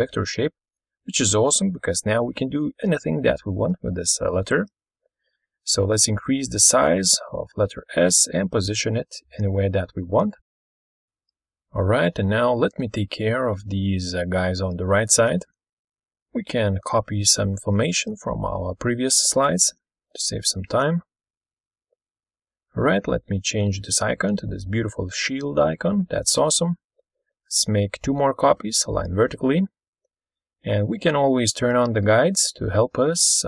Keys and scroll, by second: 13.1 ctrl+super+Left, 16.0 ctrl+super+Right, 19.0 ctrl+c, 20.5 ctrl+v, 21.8 ctrl+shift+g, 22.2-23.7 typing, 32.0 ctrl+c, 32.2 ctrl+v, 32.9-33.4 typing.